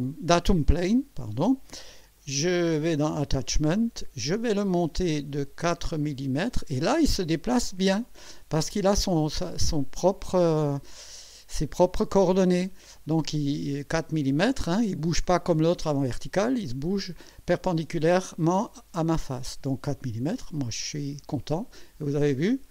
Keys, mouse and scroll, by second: 2.2 click, 2.8 click, 5.8-6.6 scroll up 3, 14.0 scroll up 1, 20.7 click.